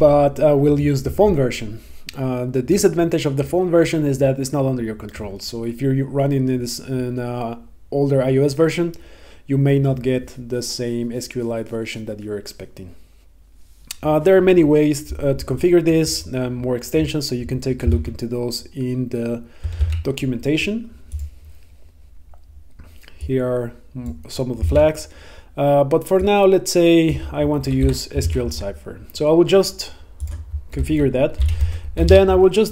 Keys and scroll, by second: 18.0 super+Tab, 19.7 super+Tab, 24.7 super+Tab, 28.3 super+s.